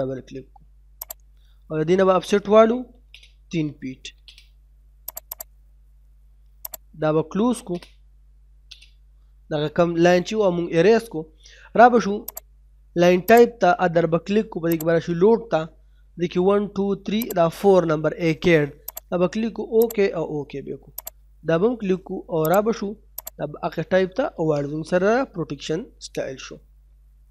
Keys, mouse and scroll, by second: 2.7 o, 2.9 space, 3.3 3, 4.1 space, 4.4-5.1 scroll up 1, 5.1 click, 7.4 e, 7.5 space, 9.3 middle click, 9.8-10.6 scroll down 1, 10.6 middle click, 12.3 click, 17.2 click, 24.7 middle click.